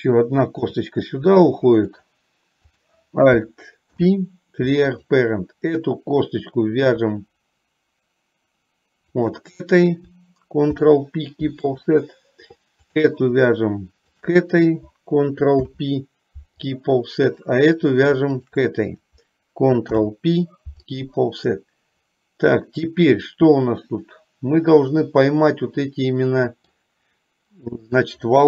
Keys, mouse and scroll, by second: 0.8 e, 4.0 alt+p, 10.8 ctrl+p, 13.0 click, 15.7 ctrl+p, 19.9 ctrl+p, 21.8-23.8 middle drag, 23.9 middle click, 24.7-26.0 middle drag, 26.2 middle click, 26.7 middle click, 28.0 click.